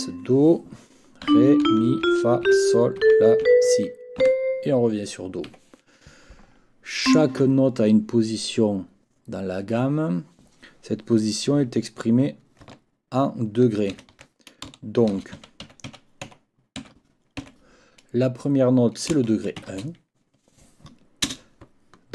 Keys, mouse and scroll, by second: 1.0-4.2 typing, 5.5 Escape, 7.0 click, 13.9 ctrl+l, 14.9-16.8 typing, 21.3 space.